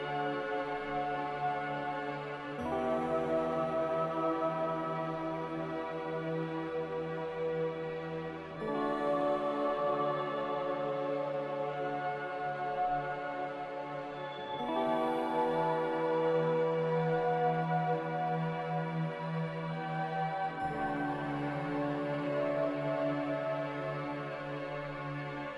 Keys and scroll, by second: 6.3 a, 13.8-15.8 typing, 20.1 Caps_Lock, 21.2-21.7 typing, 23.1-24.5 typing.